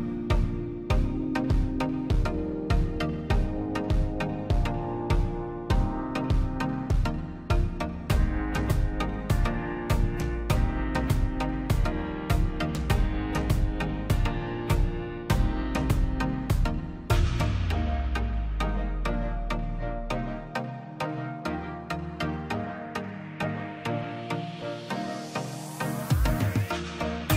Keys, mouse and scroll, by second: 0.1 l, 0.6-1.1 scroll up 1, 1.1 click, 2.0 space, 2.1 scroll down 1, 2.3 p, 2.5-4.5 drag, 4.5 scroll down 1, 4.8 middle click, 5.1-5.6 scroll up 1, 5.7 l, 6.2 click, 8.2 e, 8.3 scroll up 1, 8.5 click, 9.2-9.5 scroll down 1, 9.6 middle click, 10.1 click, 10.3 scroll down 1, 10.5 middle click, 10.8-11.3 scroll up 1, 11.3 click, 11.7 middle click, 12.0 space, 12.4 p, 12.8-14.5 drag, 14.5 scroll down 1, 14.7 middle click, 15.6 scroll down 1, 15.8-17.0 middle drag, 17.0 click, 17.4-18.0 scroll up 1, 18.0 middle click, 18.3 scroll up 1, 18.7 middle click, 19.1-19.9 scroll down 1, 20.0 click, 20.3-21.0 scroll up 1, 21.0-22.9 drag, 24.0 right click, 24.4 click, 24.9 right click, 25.5 click.